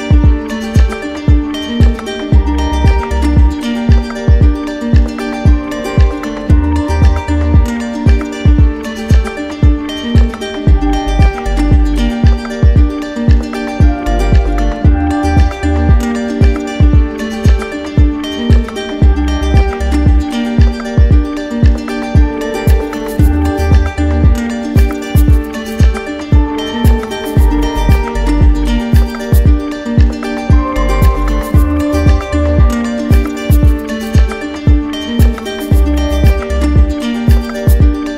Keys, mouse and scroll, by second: 1.8-2.8 drag, 7.8-8.8 drag, 9.4-10.4 drag, 12.4 click, 13.2 click, 16.0 click, 17.0 click, 18.0 click, 21.0-22.1 drag, 31.7-32.7 right drag, 33.0 w, 34.8 alt+click, 35.9 alt+click.